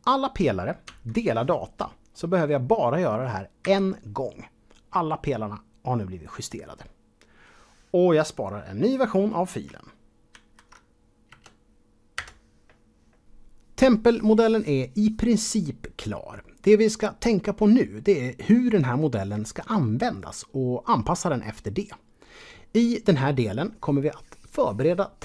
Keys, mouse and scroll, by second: 0.8 Tab, 3.6 KP_Divide, 10.3 ctrl+shift+s, 11.3 KP_Add, 12.1 Return, 13.2 click.